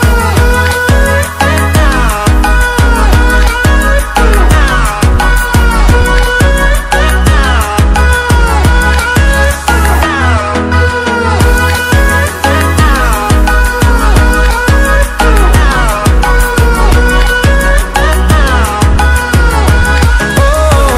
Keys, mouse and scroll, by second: 0.0 ctrl+w, 0.1 ctrl+w, 2.6 ctrl+w, 4.1 click, 10.9-19.7 drag, 19.7 ctrl+w.